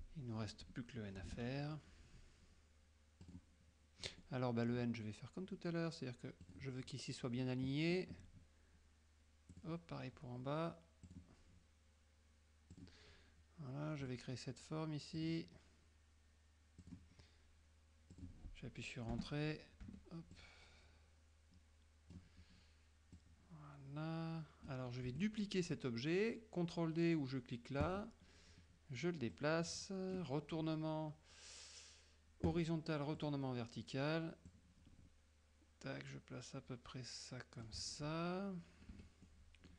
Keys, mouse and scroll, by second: 1.3 shift+F6, 1.6 shift+middle click, 3.3 click, 4.3-5.0 middle drag, 6.6 click, 9.6 click, 11.1 click, 12.8 click, 14.1 click, 15.2 click, 16.9 click, 18.2 click, 19.2 Return, 20.0 F2, 20.4-22.4 drag, 23.3-24.9 drag, 25.2 F1, 27.9 click, 29.4 click, 32.6 click, 33.2 click, 34.6-37.9 drag, 39.0 F2, 39.3 middle click.